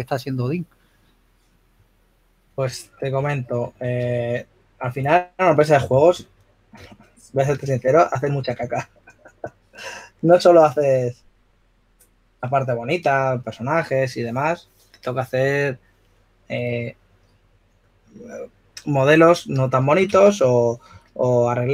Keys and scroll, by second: 3.9 s, 5.5-7.3 typing, 9.5 4, 21.1-21.7 typing.